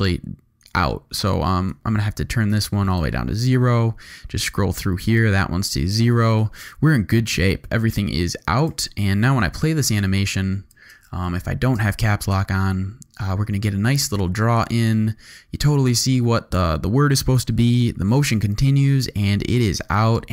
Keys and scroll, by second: 7.3 shift+super+a, 8.0 shift+super+u, 8.6 shift+u, 9.8 shift+space, 12.3 space.